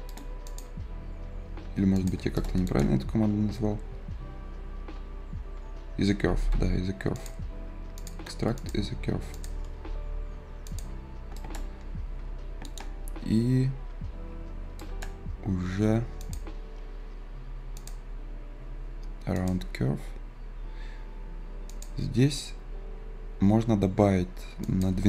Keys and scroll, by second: 2.9 Escape.